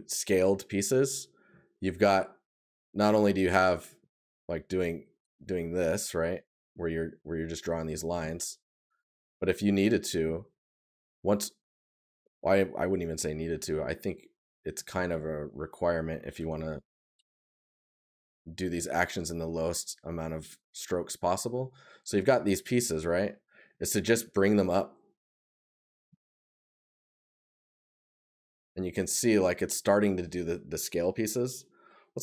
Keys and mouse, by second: 1.4 right click, 7.5 right click, 9.5 right click, 13.5 right click, 18.9 right click, 22.0 right click, 25.2 right click, 27.5 right click.